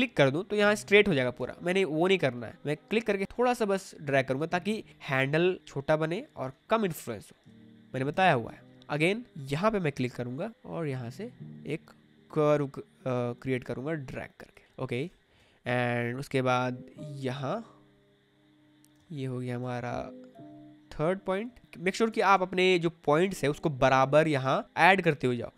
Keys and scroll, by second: 1.3 ctrl+z, 7.4 space, 15.0 space, 18.9 space, 22.2 space, 24.6 space.